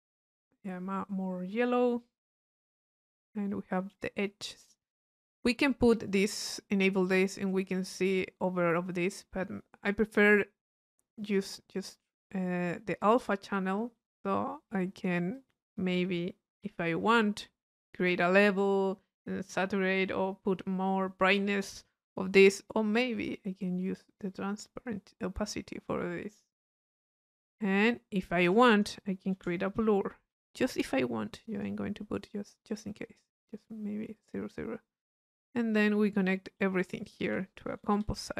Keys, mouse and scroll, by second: 2.8 middle click, 3.9-4.9 drag, 5.2 click, 7.1 click, 7.5 click, 8.0-9.5 middle drag, 11.2 click, 11.7 middle click, 12.7 click, 15.3-16.5 drag, 17.7 click, 18.3 click, 23.2 click, 24.0-26.1 drag, 27.9-29.2 drag, 30.5 u, 31.6 click, 32.2 click, 33.3 click, 34.2 click, 35.3 right click, 36.2 right click, 37.0 click, 37.9 c.